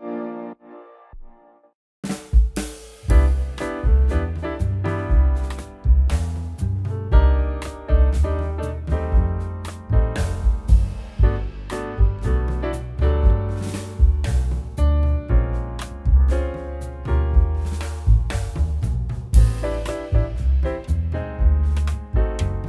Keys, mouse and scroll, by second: 0.4 middle click, 0.8 w, 1.0 middle click, 2.8-3.6 scroll down 1, 3.9-4.2 scroll up 1, 4.4 q, 4.6 q, 7.3 middle click, 7.7 Delete, 8.4 scroll up 1, 8.9 right click.